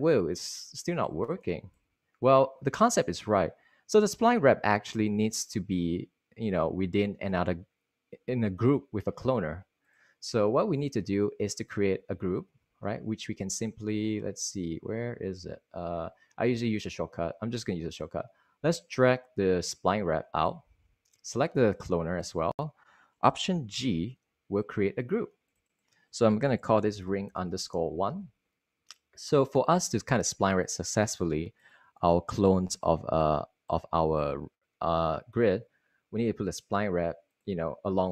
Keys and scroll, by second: 24.4 alt+g, 26.8-28.7 typing.